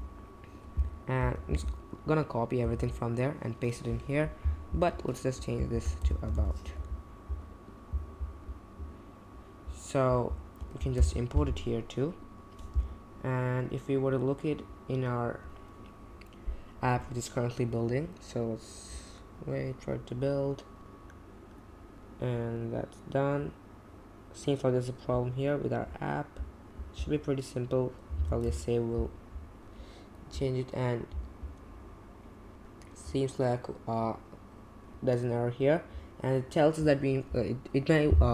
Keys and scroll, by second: 1.2 super+a, 1.5 super+c, 2.7 super+v, 5.4-7.1 typing, 10.9 super+., 28.1 super+s, 28.5 super+Tab.